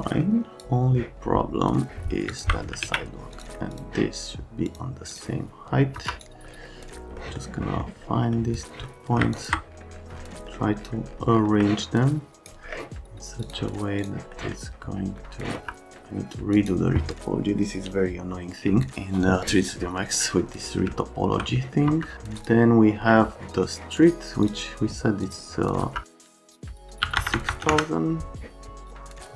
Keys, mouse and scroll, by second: 0.4 middle click, 2.3 ctrl+click, 2.8 alt+q, 3.3 click, 3.7 click, 4.7 click, 5.1 click, 5.9 F3, 6.1 click, 7.2 right click, 7.6 right click, 8.3 right click, 8.6 right click, 9.3 ctrl+click, 10.5 right click, 11.6 right click, 12.3 click, 13.4 click, 14.0 click, 14.4 right click, 15.6 F3, 16.5 click, 20.0 scroll down 2, 21.0 alt+scroll down 2, 21.1 middle click, 21.6 middle click, 21.9 F3, 22.4 click, 23.0 right click, 24.4 click, 25.2 click, 25.8 F3, 26.1 click, 26.3 click, 26.6 click, 26.8 click, 27.1 KP_6, 27.2 KP_0, 27.3 KP_0, 27.5 KP_0, 27.7 KP_Enter, 28.8 click, 29.0 click.